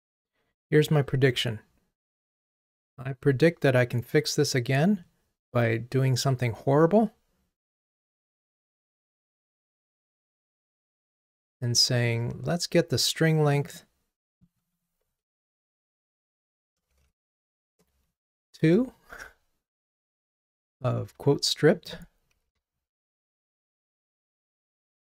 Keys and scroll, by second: 15.3 super+c, 16.2 super+d, 16.9 super+d, 17.1 alt+shift+Down, 22.5 super+c, 24.3 super+c, 24.5 super+v.